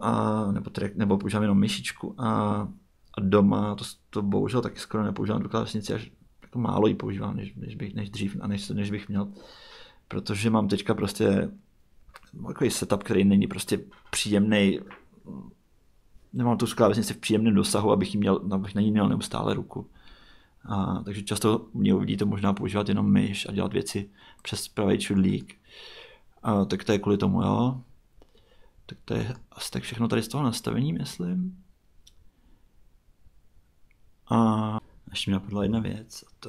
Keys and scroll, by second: 35.7 super+Tab.